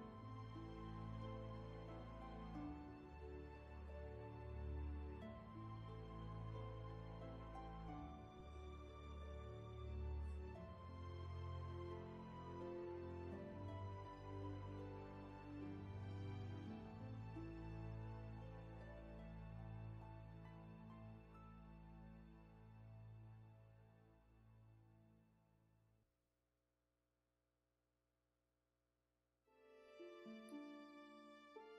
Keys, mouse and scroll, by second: 3.0 ctrl+z, 12.1 ctrl+z, 15.6 ctrl+z, 21.7 ctrl+z.